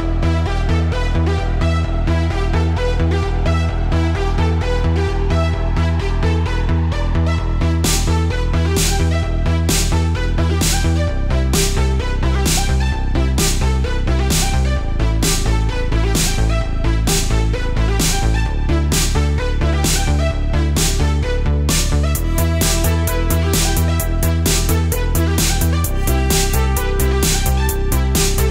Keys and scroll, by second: 0.4 space, 1.4 space, 2.0 space, 3.4 space, 4.1 alt+super+space, 4.8 alt+super+space, 7.6 space, 8.1 space, 10.3 space, 12.9 alt+super+space, 13.2 alt+super+space, 13.3 alt+super+space, 15.4 space, 16.1 space, 16.6 space, 18.0 space, 21.3 space, 21.4 space, 22.3 alt+super+space, 23.8 space, 24.3 space, 26.9 space, 27.3 super+z, 27.8 super+z.